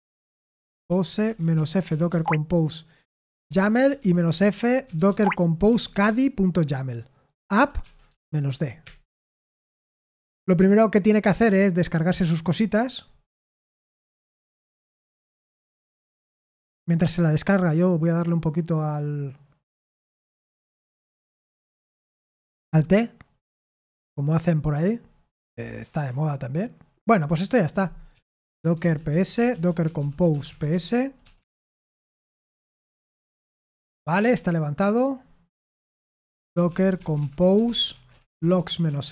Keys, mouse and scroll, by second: 0.0-3.3 typing, 4.8-6.2 typing, 8.8 typing, 28.9-31.9 typing, 37.1-39.1 typing.